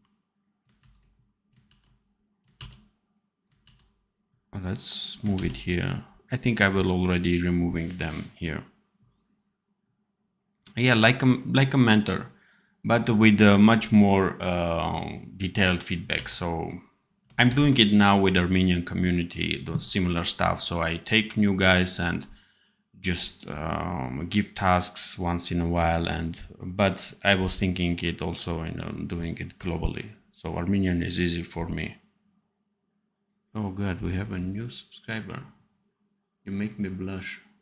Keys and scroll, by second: 0.7 ctrl+c, 1.6 ctrl+v, 16.0 v, 17.4 ctrl+s.